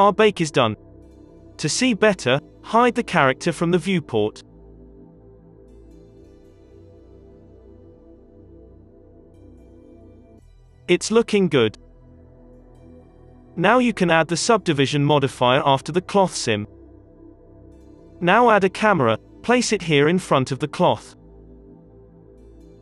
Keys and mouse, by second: 0.0 ctrl+z, 0.0 alt+a, 0.0 space, 2.2 h, 2.5 space, 5.8-7.1 middle drag, 8.1-12.1 middle drag, 12.6 space, 12.8 click, 15.3 space, 18.0 Delete, 18.0 space, 18.0 KP_1, 18.1 click, 18.3 shift+a, 20.2 KP_3, 20.7 g, 21.6 KP_0, 22.1 g.